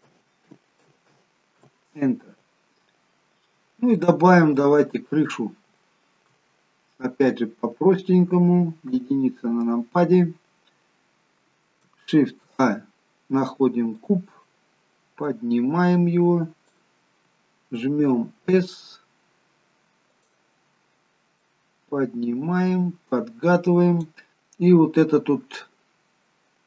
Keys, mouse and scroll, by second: 3.4-4.1 scroll down 1, 4.1 middle click, 4.1-4.7 scroll down 1, 4.9-5.7 scroll up 2, 5.7 scroll up 1, 5.9 shift+middle click, 9.7 KP_1, 12.5 shift+a, 15.4 click, 18.8 s, 21.6 click.